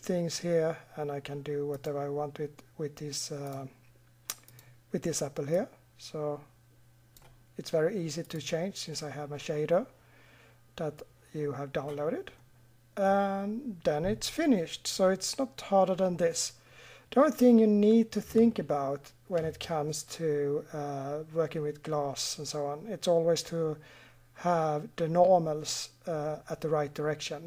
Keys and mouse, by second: 12.4-14.2 middle drag, 14.7-16.1 middle drag.